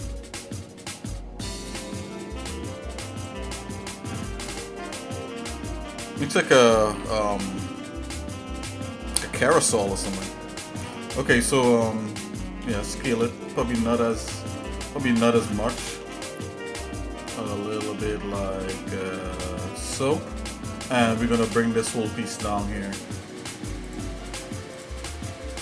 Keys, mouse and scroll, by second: 3.7 shift+middle click, 4.9 shift+middle click, 5.8 shift+middle click, 6.6 middle click, 7.1 ctrl+z, 8.0 shift+middle click, 12.7 s, 15.0 shift+middle click, 15.9 s, 20.3 shift+middle click, 22.3 click, 23.9 alt+shift+click, 25.0 click.